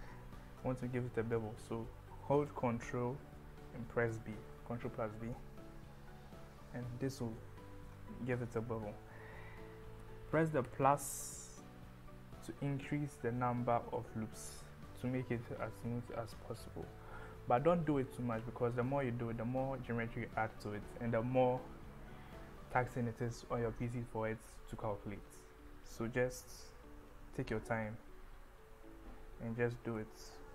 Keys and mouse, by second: 4.2 ctrl+b, 10.0 KP_Add, 18.9 KP_Add, 20.2 KP_Subtract, 28.8 KP_Add, 30.0 KP_Subtract.